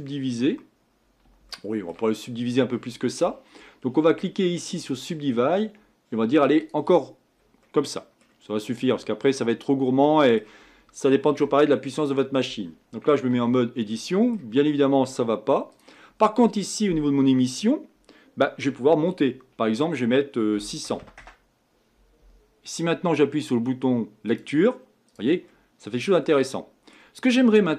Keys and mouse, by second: 2.3 click, 2.6-3.7 middle drag, 4.9-9.0 drag, 9.0-10.1 middle drag, 13.3 Tab, 15.7-21.0 drag, 21.0 KP_0, 24.4-27.2 drag, 27.6-27.7 middle drag.